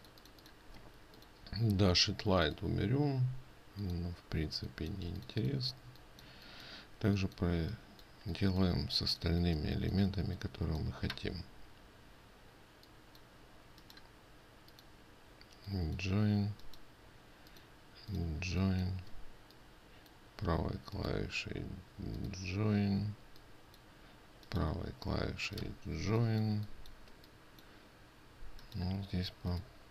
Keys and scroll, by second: 19.0 ctrl+space.